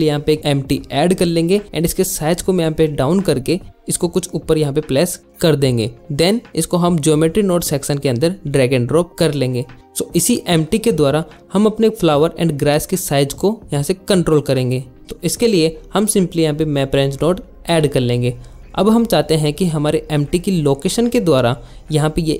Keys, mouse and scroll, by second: 3.8 g, 4.0 z, 4.6 click, 6.5 click, 6.8 click, 8.6 click, 9.8 click, 11.2 click, 11.7 click, 12.4 click, 13.6 middle click, 14.2 click, 14.5 click, 16.0 alt+shift+z, 16.2 click, 16.3 middle click, 16.6 ctrl+z, 17.1 shift+a, 18.7 middle click, 21.4 alt+shift+z.